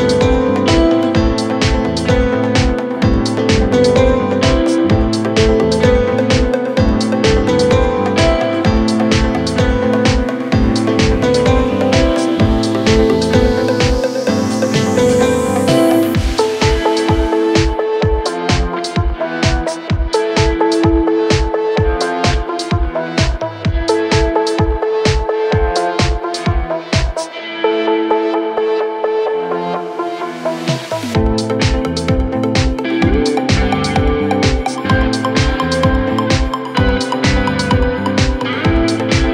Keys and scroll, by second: 0.8 4, 13.4 3, 14.5 ctrl+d, 14.7 Escape, 16.1 ], 16.8 4, 18.0 ,, 19.1 2, 22.0 4, 25.7 p, 26.2 c, 26.3 Return, 28.6 p, 29.8 3, 30.2 ], 30.7 4, 35.3 shift+f, 37.9 2.